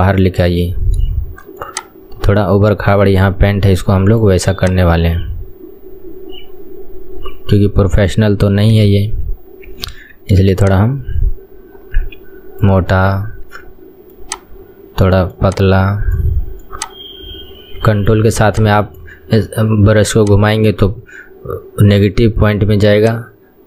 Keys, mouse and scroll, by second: 8.9 KP_3, 10.0 ctrl+KP_1, 10.6-13.6 drag, 14.3-23.6 ctrl+drag.